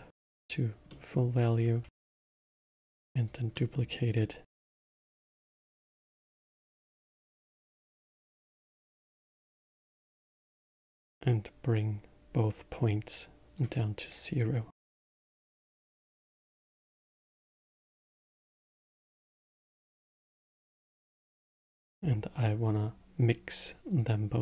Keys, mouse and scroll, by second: 0.9 middle click, 1.5 click, 2.4 shift+d, 3.5-4.7 middle drag, 4.7-7.8 drag, 12.5-16.2 drag, 16.2-17.8 middle drag, 17.8 click, 18.9 click, 19.9 click, 21.0 middle click, 21.7 shift+a.